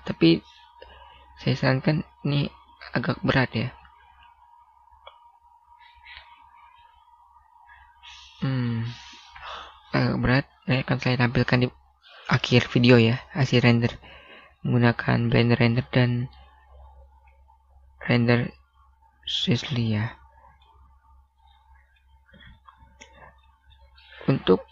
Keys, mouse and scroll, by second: 0.7-2.6 scroll down 1, 3.7 scroll up 1, 4.8 scroll down 1, 10.0 Escape, 15.8 click, 18.0 middle click, 22.4 scroll up 1, 22.6 scroll down 1, 22.7-23.5 scroll up 1.